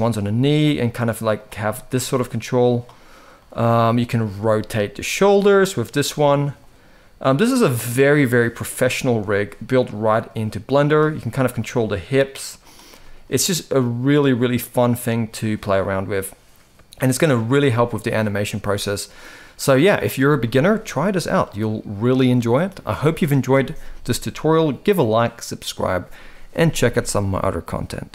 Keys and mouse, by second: 1.3 middle drag, 1.6 g, 3.0-3.3 middle drag, 3.9 click, 4.2 shift+middle drag, 4.7 r, 7.0-7.6 middle drag, 8.2 click, 8.5 middle click, 8.9 r, 10.8-11.1 middle drag, 11.2 r, 12.7-13.4 middle drag, 14.5 click, 15.0 middle click, 15.4 r, 17.9 click, 18.3 r, 20.3 shift+middle drag, 20.7-21.1 middle drag.